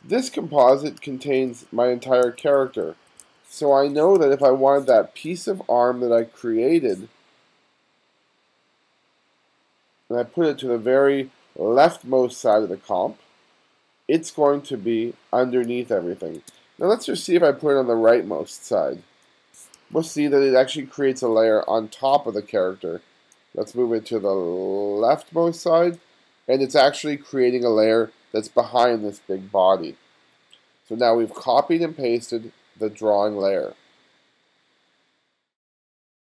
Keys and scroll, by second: 1.0 2, 2.3 1, 3.6 space, 4.2 2, 4.9 space, 16.0 2, 16.5 space, 19.8 2.